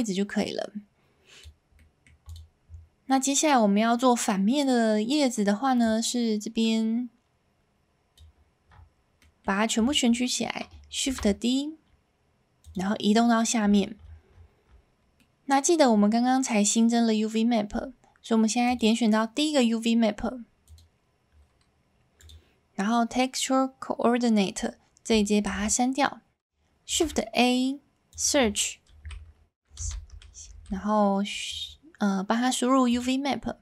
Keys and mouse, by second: 0.0-1.4 drag, 1.9 middle click, 6.2-8.7 middle drag, 9.4-9.8 middle drag, 10.7 s, 12.6 click, 13.3-13.7 middle drag, 15.3 middle click, 20.6 click.